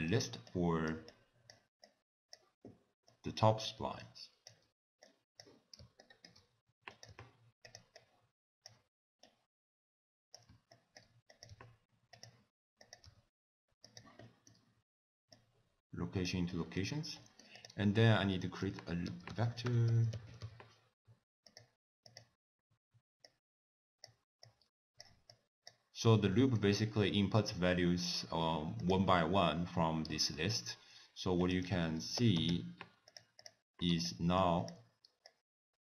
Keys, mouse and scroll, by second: 0.1-0.5 scroll up 2, 0.5 click, 1.1 click, 1.9 click, 3.1 click, 5.1 click, 6.0 shift+right click, 6.9 click, 7.1 g, 8.0 click, 9.3 click, 10.8 shift+right click, 11.4 click, 11.5 g, 12.9 click, 13.1 g, 14.2 middle click, 15.4 click, 16.5 middle click, 17.3 middle click, 17.6 click, 18.2 ctrl+a, 23.3 click, 24.5 click, 25.3 click, 26.1-26.8 scroll up 2, 26.3 middle click, 26.8-27.2 scroll down 2, 28.9 click, 31.4 click, 31.8 ctrl+a.